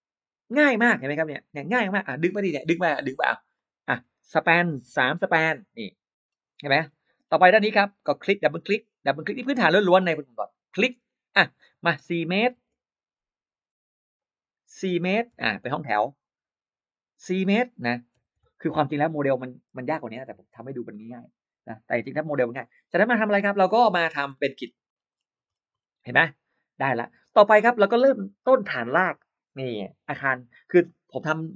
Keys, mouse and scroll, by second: 2.4 middle click, 3.4 click, 4.6 4, 4.8 Return, 6.1-6.4 scroll up 1, 6.5 middle click, 7.1 scroll up 1, 8.3 click, 8.4 click, 9.4 click, 9.6 click, 10.3-10.6 scroll up 1, 10.9 click, 12.3 4, 12.5 Return, 14.0 click, 15.2 4, 15.3 Return, 17.0 click, 18.0 4, 19.0 Return, 19.5 space, 24.2 middle click, 24.2-25.0 scroll down 2, 25.3 scroll up 1, 25.6 middle click.